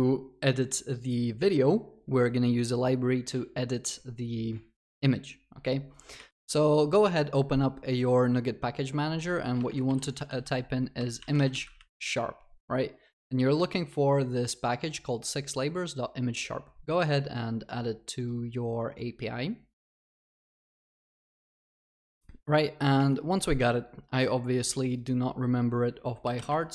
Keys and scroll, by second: 6.4 alt+3.